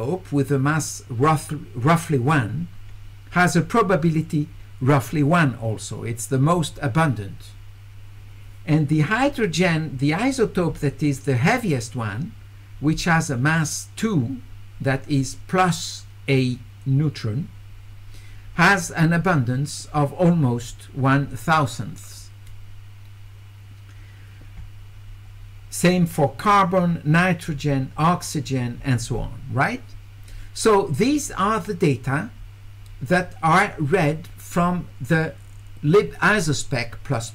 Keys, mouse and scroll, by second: 27.7 middle click, 29.1 middle click, 30.9 click.